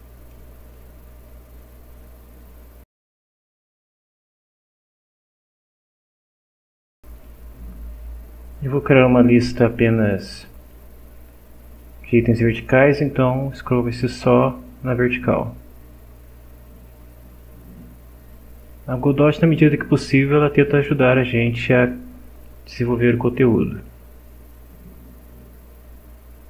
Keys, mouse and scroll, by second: 0.7-4.3 drag, 5.0 scroll down 1, 5.5 click, 7.0 click, 7.2 click, 10.7 click.